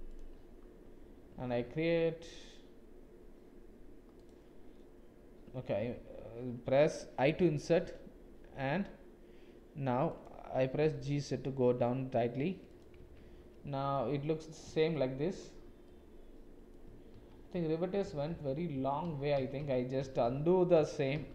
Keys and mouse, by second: 1.5 ctrl+r, 5.8 ctrl+z, 7.3 i, 10.6 g, 13.2 Tab, 13.9 click, 14.2 middle click, 14.9 shift+click, 15.9-16.7 drag, 17.1-21.3 ctrl+z.